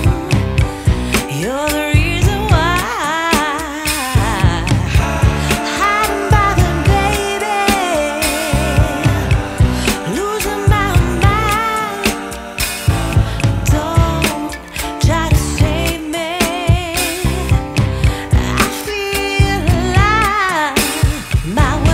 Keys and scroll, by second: 4.4 Up, 4.6 F2, 5.4 F3, 9.6 shift+F2, 16.7 F2.